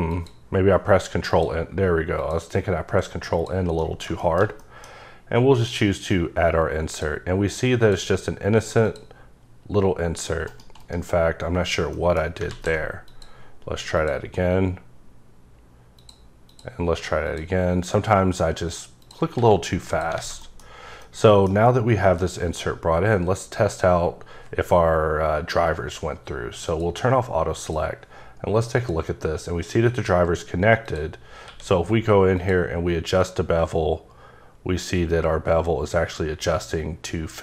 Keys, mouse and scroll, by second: 0.1 click, 1.3 click, 2.2 click, 3.3 click, 3.7 scroll up 1, 3.8 middle click, 4.1 shift+scroll down 1, 4.2 shift+middle click, 5.5 click, 6.9 click, 7.8 click, 8.8 click, 10.5 right click, 10.8 right click, 11.9 middle click, 12.5 ctrl+z, 13.0 click, 14.0 click, 14.7-15.6 scroll up 3, 15.9 click, 16.5 click, 17.3 click, 18.1-19.0 scroll down 1, 19.0 click, 19.3 s, 19.8 click, 20.2 a, 20.4 middle click, 21.0 middle click, 26.7 click, 27.6 click, 28.7 click, 30.8 click, 31.4 q, 32.4 click.